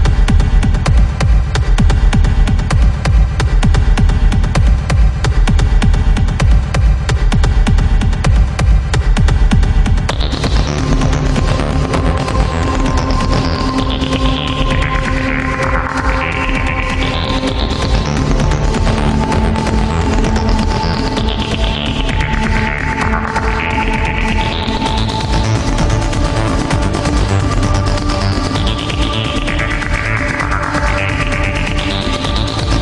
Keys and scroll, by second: 5.1 ctrl+z, 8.3 ctrl+z, 12.8 ctrl+z, 18.1 ctrl+z, 23.9 ctrl+z, 27.1 ctrl+z.